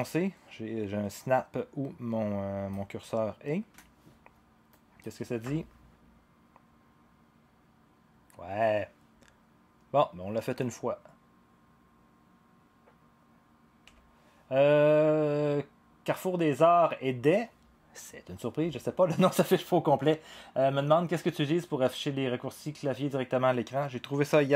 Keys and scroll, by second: 5.4 0, 13.8 0.